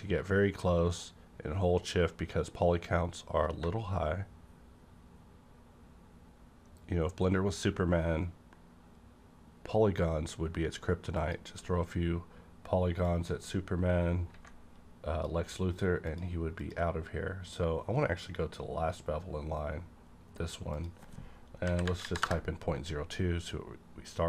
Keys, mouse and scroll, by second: 3.6-4.1 scroll down 1, 11.1 shift+click, 13.0-16.0 shift+drag, 16.0 click, 16.6 click, 17.6 scroll down 1, 20.7 click, 21.6 KP_Decimal, 21.8 KP_0, 22.0 KP_2, 22.2 KP_Enter.